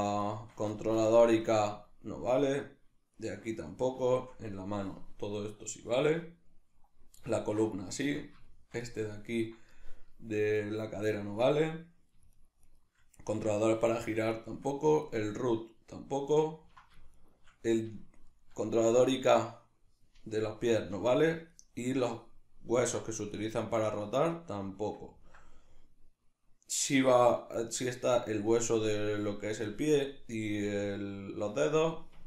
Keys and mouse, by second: 0.3 shift+right drag, 0.8-1.4 shift+middle drag, 1.4 shift+right drag, 2.6 shift+right drag, 3.2 shift+right click, 4.1-8.0 shift+middle drag, 8.0 shift+right click, 8.5-12.4 shift+middle drag, 12.4 shift+right click, 12.7 shift+right drag, 14.4 shift+right drag, 15.2-17.2 middle drag, 17.2 shift+right click, 18.2 shift+right click, 21.5 shift+right click, 21.9 shift+right drag, 22.8 shift+right click, 23.3-24.3 shift+right drag, 24.3-32.2 middle drag.